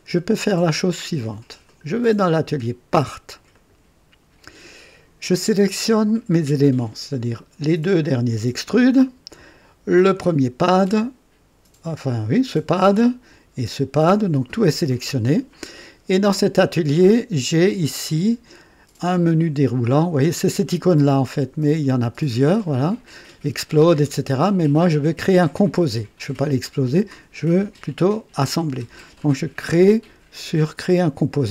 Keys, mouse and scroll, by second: 3.7 click, 8.0 ctrl+click, 10.1 ctrl+click, 13.6 ctrl+click, 22.1 click.